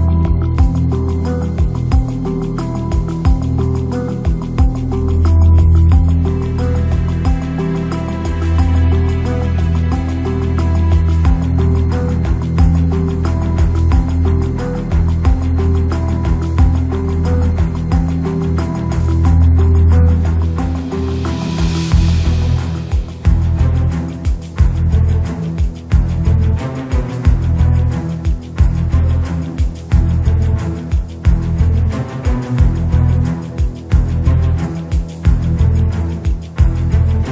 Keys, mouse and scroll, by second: 2.5 ctrl+4, 3.5 click, 3.9 click, 4.4 shift+a, 6.5 g, 8.0-9.4 drag, 11.0 Tab, 11.7 2, 12.0 KP_7, 13.3 alt+click, 14.0 alt+shift+click, 16.6 alt+shift+click, 17.1 click, 18.1 s, 18.9 Tab, 19.4 ctrl+4, 20.1 Tab, 20.5 s, 21.3 Tab, 22.4 s, 23.2 middle click, 24.5 s, 26.6 s, 28.3 middle click, 29.0 s, 29.7 s, 31.0 middle click, 31.8 s, 32.7 s, 34.8 middle click, 35.9 click, 36.6 s.